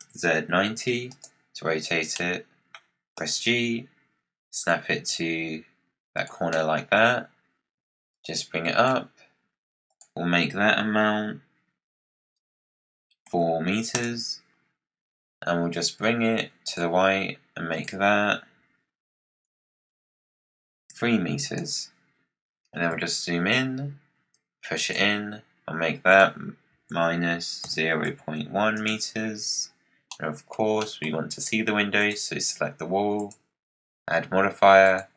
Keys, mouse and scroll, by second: 2.1-3.1 middle drag, 3.1 g, 5.0 g, 6.4-6.9 middle drag, 6.9-7.3 scroll down 5, 8.0 click, 9.8-12.9 drag, 15.9 click, 17.6-20.8 drag, 22.8 KP_Decimal, 24.3 click, 26.0-29.1 drag, 29.6-30.0 scroll down 6, 30.0 middle click, 30.4 scroll down 4, 30.7-31.9 middle drag, 31.9 click, 33.1-35.1 drag.